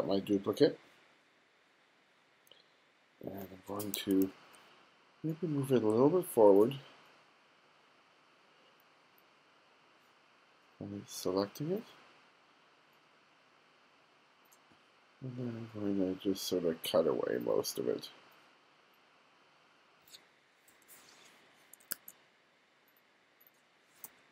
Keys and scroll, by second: 20.8 BackSpace, 21.9 super+z, 24.1 BackSpace.